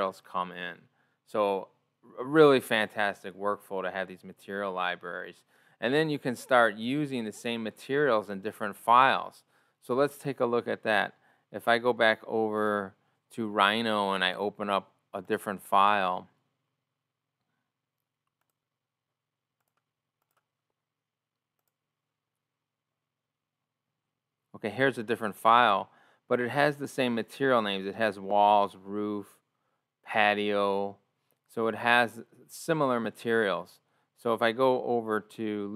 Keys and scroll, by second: 35.6 o.